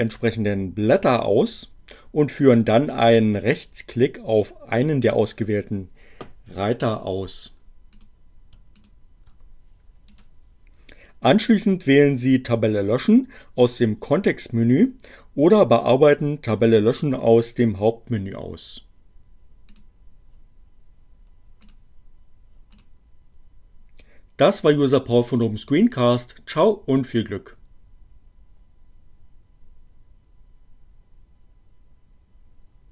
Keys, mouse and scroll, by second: 8.0 click, 8.8 shift+click, 10.1 right click, 19.7 click, 21.6 click, 22.6 click.